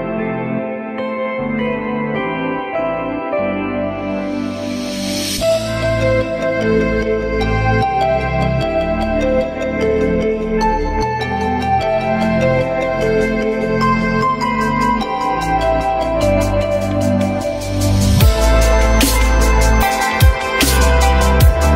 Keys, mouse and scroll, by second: 0.0 F3, 1.5 alt+middle click, 2.1 j, 4.5 F4, 7.4 alt+middle click, 7.9 alt+middle click, 8.2 F3, 19.5 F3.